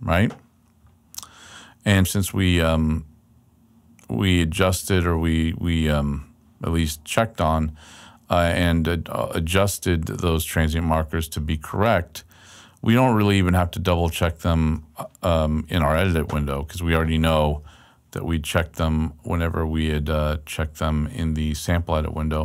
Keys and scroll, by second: 18.2 super+Left, 19.9 super+Right.